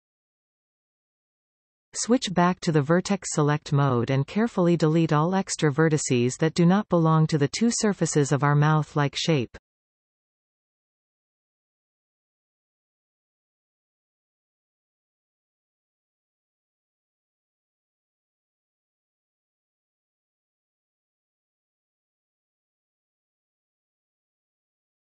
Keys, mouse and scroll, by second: 1.0-4.7 middle drag, 4.7 click, 5.2-5.5 scroll up 1, 6.4 alt+shift+click, 7.3-10.8 middle drag, 10.8 alt+shift+click, 11.4 scroll down 1, 11.7-13.3 middle drag, 13.3 alt+shift+click, 14.2-16.0 middle drag, 16.0 alt+shift+click, 16.6-25.0 middle drag, 17.7 x, 23.4-24.5 scroll up 2.